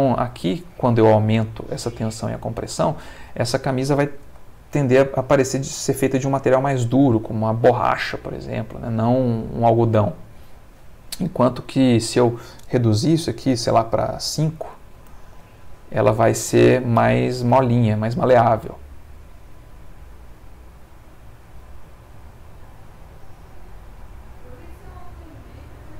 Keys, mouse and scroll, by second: 0.7 Escape, 4.2 space, 10.2 Escape, 12.0 ctrl+click, 14.3 5, 14.9 Tab, 15.4 5, 16.5 Return, 17.5 space.